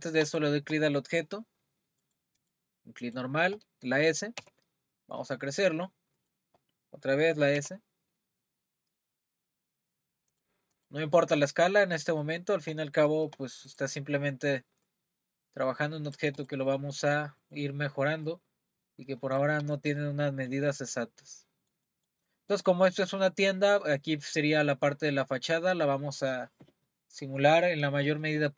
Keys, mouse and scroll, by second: 0.2 click, 2.0 click, 3.0 click, 4.4 s, 7.6 s, 10.8 click, 11.1-11.4 scroll down 3, 11.4-12.2 middle drag, 12.2 click, 13.7-14.9 drag, 16.4 click, 16.7-17.4 middle drag, 17.4 click, 18.3 click, 19.7 click, 20.0-27.1 middle drag.